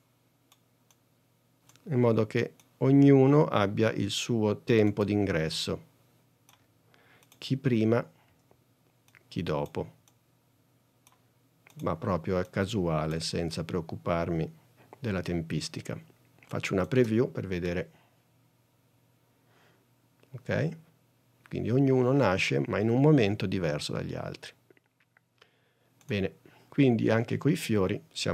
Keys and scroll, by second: 2.4 s, 4.9 s, 8.4 s, 12.1 s, 17.1 space.